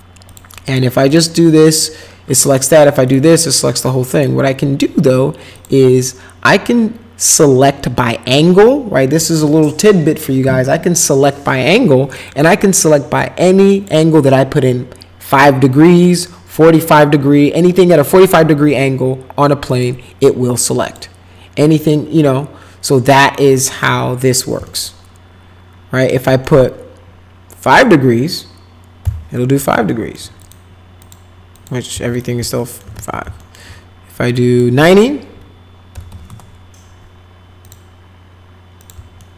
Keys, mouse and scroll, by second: 0.3 click, 0.7 click, 1.1 click, 2.5 click, 3.1 click, 4.1 click, 5.5 click, 12.3 click, 13.2 click, 19.7 click, 20.8 click, 21.8 click, 23.7 click, 24.7-26.1 alt+middle drag, 26.3 alt+middle click, 27.6 click, 29.0 5, 29.9 alt+middle click, 30.4 click, 31.0 click, 31.5 click, 32.1 click, 32.6 alt+middle click, 32.9 ctrl+z, 33.4 alt+middle click, 34.3 click, 35.7-36.8 typing, 37.6 click, 38.8 click, 39.2 alt+right click.